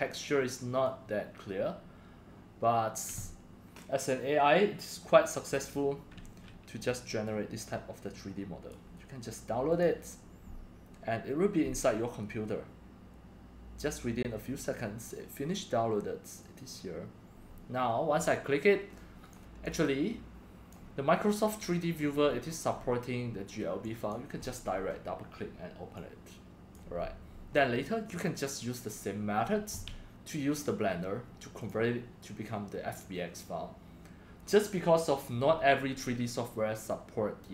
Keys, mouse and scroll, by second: 0.9-4.5 drag, 4.5-7.0 drag, 7.2-8.0 drag, 8.1-8.7 drag, 9.7 click, 15.9 click, 16.4 click, 19.0 click, 19.4 right drag, 19.6-20.7 drag, 20.8-22.3 drag, 22.3-22.6 scroll down 3, 22.6-23.7 scroll up 4, 24.1 drag, 24.4 right click, 24.5-26.0 scroll up 3, 24.8 right click, 26.0-27.5 drag, 28.1 click, 28.6 middle click, 29.9 click, 31.0 click, 31.6 click, 32.5-33.4 drag, 36.8-37.5 drag.